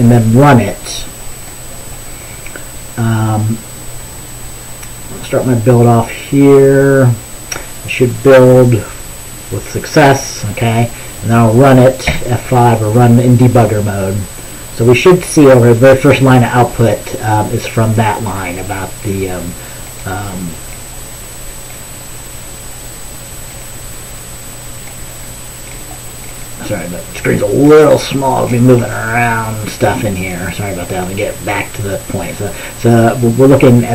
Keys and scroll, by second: 12.2 ctrl+b, 12.2 F5.